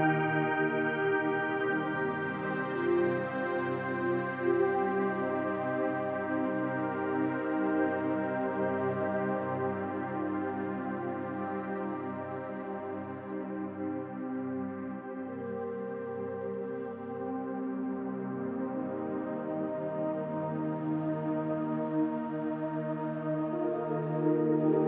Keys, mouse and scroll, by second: 0.7 click, 2.5 click, 4.0 click, 5.1-6.4 scroll down 1, 6.4 click, 7.0-9.5 drag, 10.6 click, 11.7-13.1 drag, 14.1 click, 14.3 click, 14.9-17.5 middle drag, 17.9-21.3 middle drag, 21.6 scroll down 1, 21.9-22.8 middle drag, 24.0 1, 24.2 click.